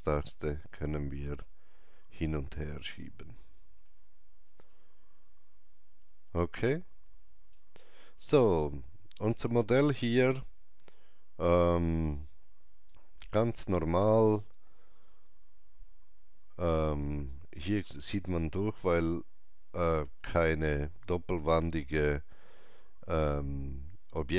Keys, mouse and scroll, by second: 4.7 alt+right click, 10.6 alt+right click, 10.6 shift+middle click, 12.1-13.8 drag, 12.5 alt+right click, 12.5 alt+middle click.